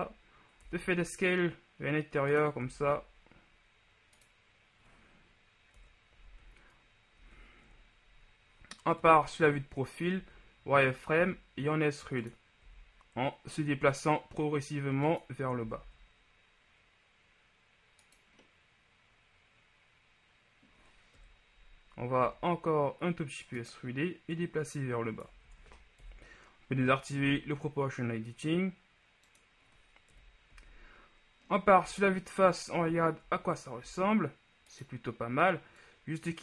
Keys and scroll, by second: 0.1 s, 0.7 s, 0.9 z, 2.7 s, 2.9 z, 6.0 KP_3, 6.4 z, 7.3 z, 7.7 KP_1, 9.1 KP_3, 10.3 z, 11.3 e, 12.7 g, 15.7 s, 15.9 z, 21.5 KP_3, 22.3 e, 25.5 ctrl+z, 26.1 ctrl+o, 27.3 g, 30.3 KP_1, 30.7 z, 32.0 z, 33.9 ctrl+z.